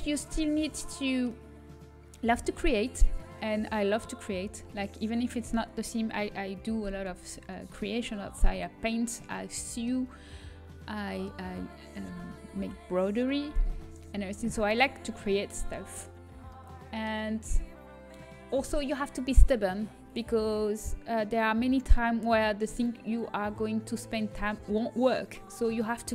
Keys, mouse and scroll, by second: 0.4-2.2 middle drag, 3.0-5.2 right drag, 5.2-6.9 middle drag, 7.2-16.5 middle drag, 17.2-19.8 middle drag.